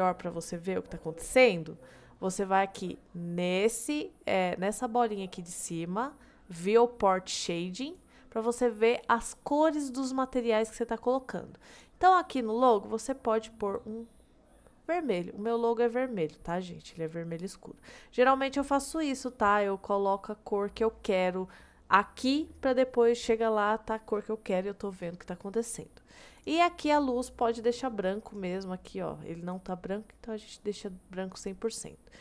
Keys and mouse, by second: 7.9 click, 26.4 click, 28.3 click, 31.4-32.2 middle drag.